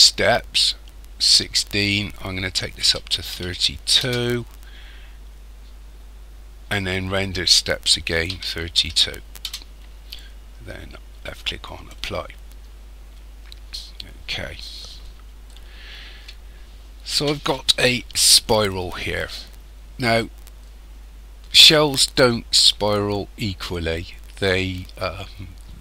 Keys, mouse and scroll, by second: 1.7 click, 7.3 click, 11.7 click, 13.1-13.9 scroll up 2, 13.9-14.8 scroll up 3, 15.5 shift+middle click.